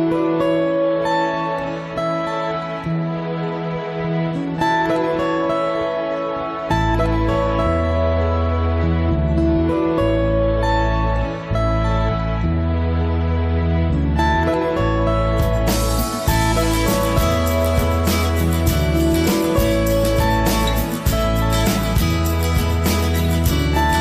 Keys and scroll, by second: 15.9 ctrl+z, 19.1 ctrl+c, 19.3 ctrl+v.